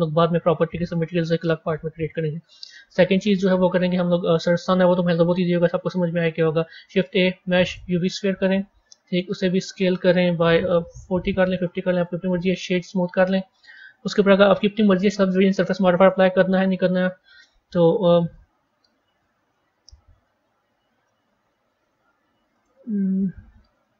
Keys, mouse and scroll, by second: 1.0-4.0 middle drag, 4.0 shift+a, 12.2-15.5 right drag, 15.5 middle click, 16.5 KP_1, 18.5-19.0 scroll down 4, 19.0-21.6 middle drag, 21.6 g.